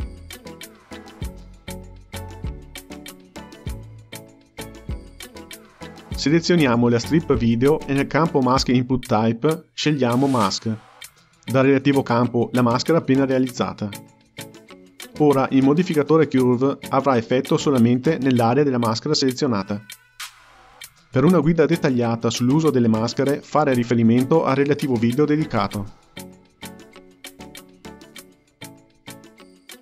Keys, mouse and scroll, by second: 1.5 g, 6.6 click, 8.5 click, 9.6 click, 16.0-28.7 drag.